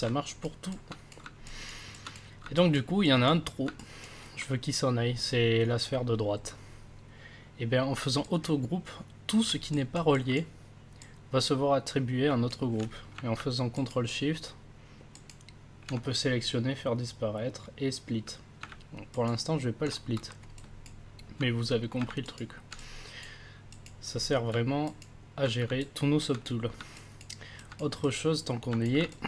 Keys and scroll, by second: 22.0 ctrl+s, 24.5 ctrl+s.